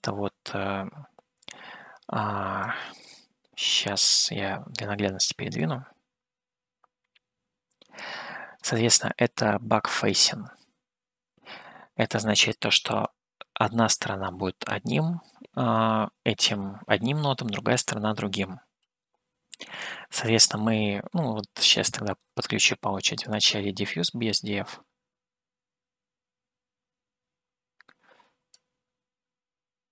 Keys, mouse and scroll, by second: 3.1-5.3 drag, 5.8-9.0 drag, 10.3-12.0 drag, 13.5-14.8 drag, 19.4-20.9 middle drag, 21.5-22.7 middle drag, 23.4-25.2 drag, 28.8-29.9 drag.